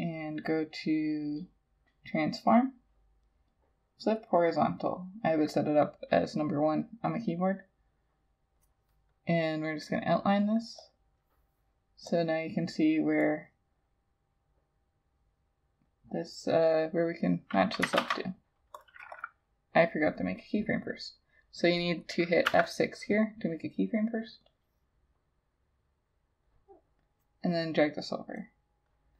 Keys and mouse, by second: 18.0 ctrl+z, 19.2 double click, 22.5 F6.